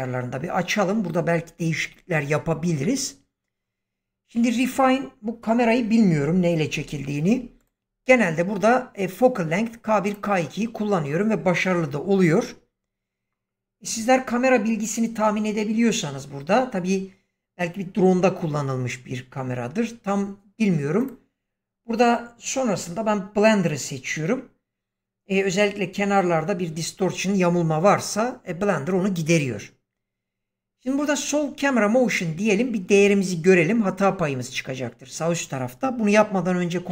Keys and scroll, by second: 36.8 ctrl+s.